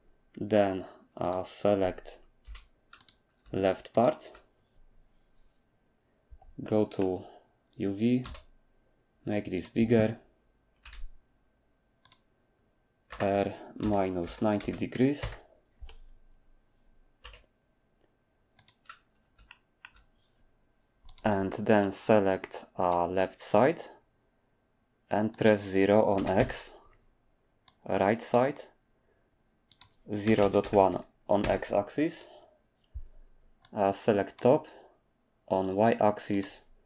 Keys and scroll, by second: 2.4 3, 8.2 s, 10.8 g, 13.1-15.2 typing, 17.0-17.7 typing, 26.1 typing, 30.2-30.9 typing, 36.4-36.8 typing.